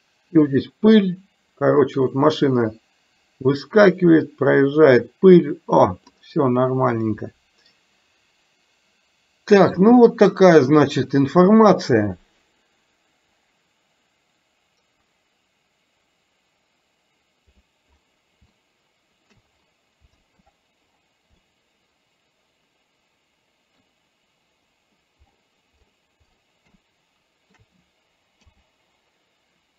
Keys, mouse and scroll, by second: 10.4 click, 13.5-17.6 drag, 18.6-19.5 shift+middle drag, 21.6-24.0 middle drag, 26.9-27.6 shift+middle drag, 28.5 KP_0.